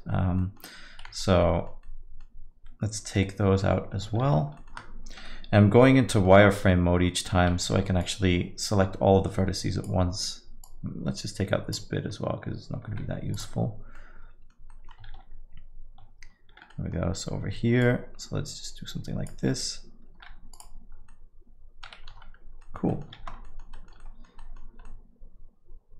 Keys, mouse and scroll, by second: 0.4 middle click, 1.7 Tab, 1.8 alt+middle click, 1.8 alt+middle click, 4.2 shift+z, 4.5 middle click, 5.2 KP_7, 6.1 middle click, 7.7 alt+a, 8.0 click, 12.9 click, 12.9 x, 14.3 middle click, 14.7 middle click, 15.1 shift+z, 16.5 shift+z, 16.7 middle click, 17.8 click, 20.1 x, 21.4 middle click, 22.3 Tab, 22.6 alt+middle click, 22.9 middle click, 23.2 shift+z, 23.5 alt+middle click, 23.7 middle click, 24.0 alt+middle click, 24.4 middle click, 24.6 scroll down 1, 24.9 alt+middle click.